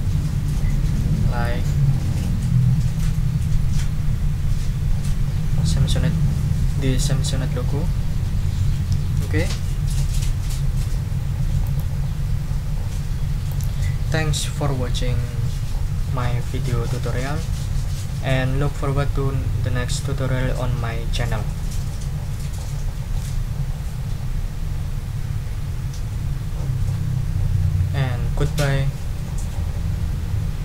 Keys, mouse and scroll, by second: 1.0 click, 11.6 click, 13.5 click.